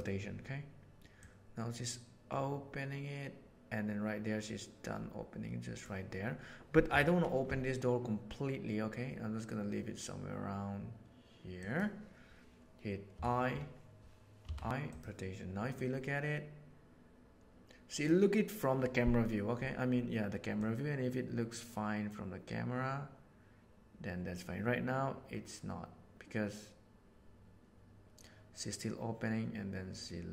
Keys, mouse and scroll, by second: 1.1-5.7 drag, 6.8 r, 13.1 t, 14.3 i, 15.7-18.1 drag, 20.5-21.4 drag, 29.1-30.3 drag.